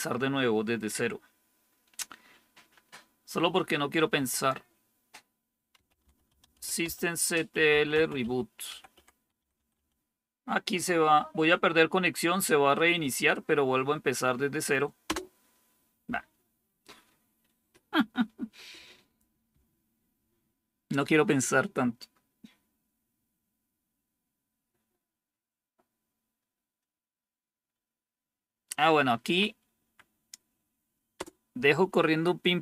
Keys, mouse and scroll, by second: 5.6-10.2 typing, 15.0 Return, 29.2 Up, 29.7 Up, 31.1 Return.